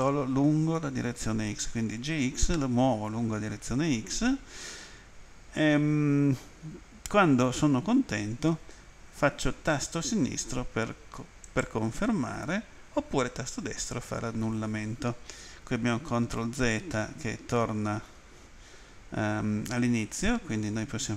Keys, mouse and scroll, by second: 11.4 click.